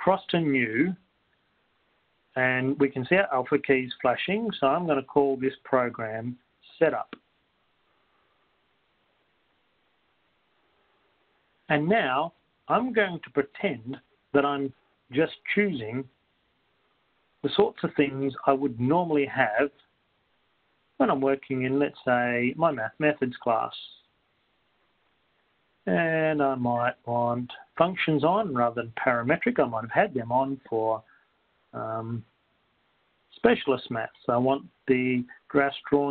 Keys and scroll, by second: 2.0 Right, 2.0 Return, 8.5-10.0 typing, 12.3 Return, 17.0-17.7 typing, 20.5 Return, 21.4 Right, 21.5 Down, 23.5 Return, 29.5 Return, 32.9 Right, 33.5 Return, 33.5 Down.